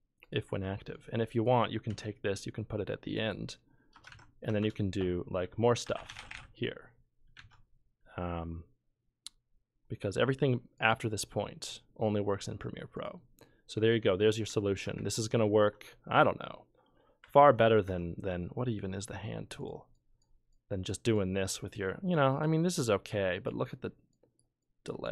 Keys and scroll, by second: 1.9 ctrl+c, 3.9 Return, 4.1 ctrl+v, 4.5 Return, 4.6 Return, 5.6-7.0 typing, 7.3 ctrl+z.